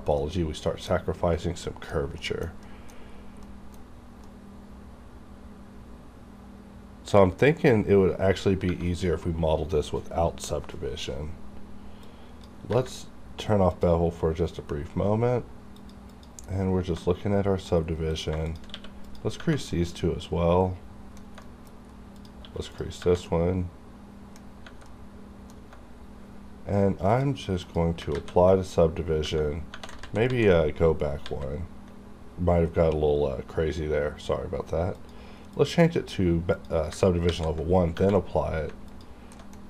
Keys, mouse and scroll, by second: 0.2 middle click, 1.4 scroll down 1, 1.7 middle click, 2.2 scroll down 1, 2.6 middle click, 3.1 scroll up 1, 3.4 middle click, 3.8 scroll up 1, 4.2-8.7 middle drag, 12.1-13.7 drag, 14.5-15.8 scroll down 1, 15.8 click, 16.6 scroll up 1, 17.0 middle click, 18.1 click, 18.1 click, 18.7 q, 19.1 click, 19.7 scroll down 1, 21.4 middle click, 21.8-22.2 scroll up 1, 22.2 click, 22.4 q, 22.7 click, 23.3 middle click, 24.5 scroll up 1, 24.9 middle click, 27.1 click, 28.1 ctrl+a, 30.0 ctrl+z, 33.7 scroll down 1, 34.9 click, 36.5 click, 37.3 ctrl+a, 38.3-38.7 scroll down 2, 38.9 alt+click, 39.3 alt+middle click.